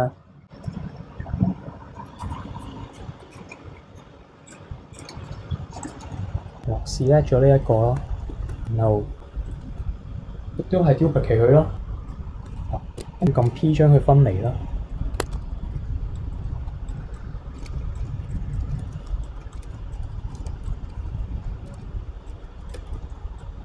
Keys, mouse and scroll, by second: 0.6-1.1 middle drag, 1.1-2.0 scroll up 1, 2.0-3.0 scroll down 4, 3.0-3.7 scroll up 1, 3.7-4.5 scroll up 1, 4.5 drag, 4.9 click, 5.8 alt+click, 8.5 shift+d, 12.1 p, 13.0 Tab, 13.2 click, 14.5 middle click, 15.2 Tab, 15.3 a, 15.5 middle click, 15.6 KP_3, 15.7 KP_1, 15.8-16.1 scroll down 1, 16.1 click, 17.1 click, 17.2-17.6 scroll up 4, 17.7-20.4 typing, 17.9 alt+click, 18.3 ctrl+click, 19.5 alt+click, 22.9 a, 23.1 middle click, 23.4 click.